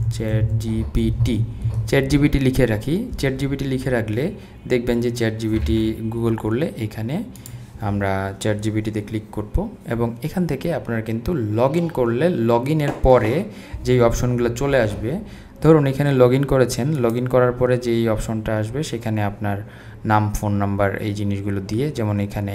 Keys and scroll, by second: 0.0-1.7 typing.